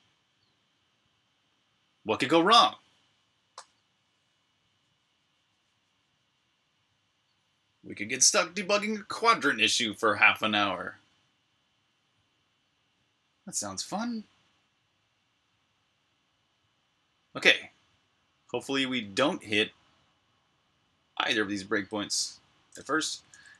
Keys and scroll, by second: 22.9-23.5 typing.